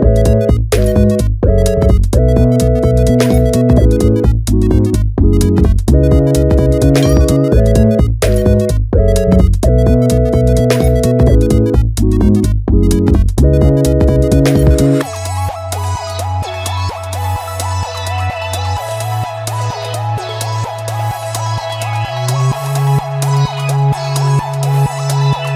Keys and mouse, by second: 0.1 shift+d, 2.5 click, 2.8 click, 3.1 e, 3.7 click, 3.8 KP_3, 4.1 shift+middle click, 4.4 g, 5.5 f, 5.9 g, 6.0 g, 6.9 click, 7.0 click, 7.2 Tab, 8.5 g, 9.2 click, 9.9 Escape, 9.9 g, 9.9 s, 10.0 z, 10.5 KP_Enter, 10.6 shift+middle click, 11.2 g, 11.6 click, 11.7 KP_1, 11.9 g, 12.0 x, 12.4 click, 12.5 ctrl+z, 12.6 middle click, 12.9 shift+click, 13.2 KP_1, 13.7 g, 14.0 click, 14.3 click, 15.0-16.7 typing, 15.4 click, 15.9 ctrl+click, 16.2 shift+click, 16.9 click, 17.1-18.3 middle drag, 18.3 Tab, 18.5 click, 19.0 shift+d, 19.1-20.3 right drag, 20.3 click, 20.5 Tab, 21.1 click, 21.4 KP_1, 21.5 alt+z, 22.2 click, 22.4 shift+click, 22.6 KP_3, 23.5 middle click, 24.4 KP_1, 24.4 g, 24.5 g, 25.0 click, 25.3 click.